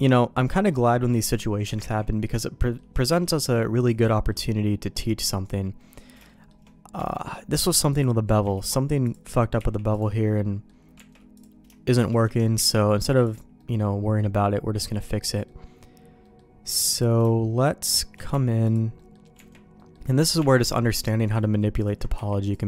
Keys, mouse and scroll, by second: 1.1 middle click, 1.8 ctrl+z, 2.2 middle click, 3.1 x, 4.1 middle click, 4.9 middle click, 5.8 middle click, 6.2 shift+middle click, 6.9 Tab, 7.9 click, 9.0 ctrl+click, 9.6 x, 10.3 middle click, 10.9 Tab, 11.3 click, 11.9 shift+click, 12.5 x, 13.6 middle click, 14.4 middle click, 15.3 middle click, 16.2 middle click, 16.9 click, 17.8 shift+click, 18.3 x, 18.9 middle click, 19.3 Tab, 19.7 middle click, 20.4 Tab, 21.0 click, 22.1 q.